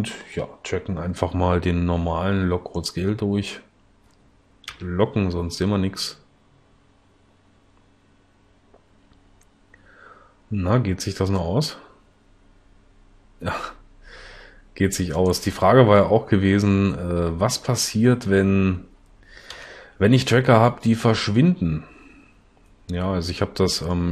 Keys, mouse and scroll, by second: 4.7 l, 19.6 l, 20.2 l.